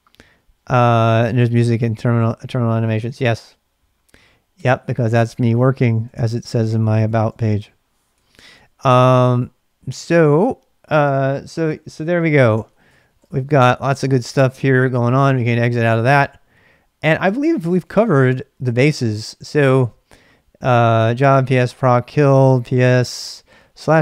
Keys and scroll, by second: 4.5 Return, 4.7-9.4 typing, 10.7-16.2 typing, 17.3-19.8 typing, 23.1 typing.